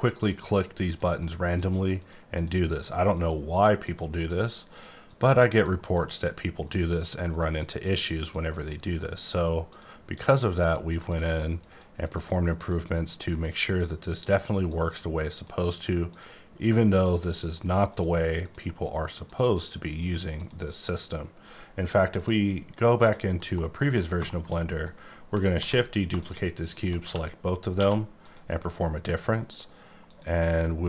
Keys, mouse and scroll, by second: 0.1 click, 0.5 click, 0.9 click, 1.1 click, 1.5 click, 1.9 click, 2.3 click, 3.1 click, 3.5 click, 3.8 click, 4.2 click, 4.4 double click, 4.7 click, 5.1 click, 5.5 click, 5.8 click, 6.2 click, 6.6 click, 7.0 click, 7.3 click, 7.5 click, 7.8 double click, 8.2 click, 8.5 click, 8.9 double click, 9.1 click, 9.6 click, 10.2 click, 10.6 click, 11.0 click, 11.6 click, 12.1 click, 12.5 click, 12.9 click, 13.3 click, 14.2 click, 14.6 click, 15.3 click, 15.7 click, 16.1 click, 16.6 click, 16.9 click, 17.4 click, 17.9 click, 18.4 click, 18.8 click, 19.2 click, 19.6 click, 19.9 click, 20.3 click, 20.7 click, 22.1 click, 23.0 click, 23.4 middle click, 24.0-24.3 scroll down 2, 24.3 shift+middle click, 25.0 scroll down 1, 25.5 shift+d, 26.1 shift+click, 26.7 shift+click, 27.0 q, 27.7 q, 28.2 click, 28.8 middle click, 30.1 click.